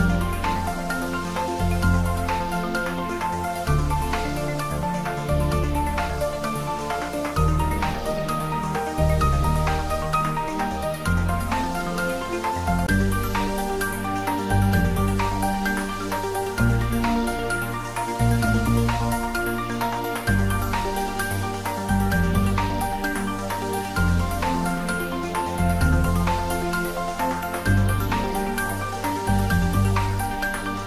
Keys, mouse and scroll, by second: 2.9 middle click, 3.8-5.5 middle drag, 5.3-6.6 typing, 8.4 click, 8.8-10.5 middle drag, 10.5 click, 11.5-12.5 typing, 13.5 x, 15.4 click, 15.8-18.6 middle drag, 18.6 click, 19.3-20.7 middle drag, 20.7 click, 21.7 s, 22.0 x, 23.4 click, 24.0 g, 24.7 x, 26.5 click, 26.9 middle click, 28.0 scroll down 1, 28.4-30.8 middle drag.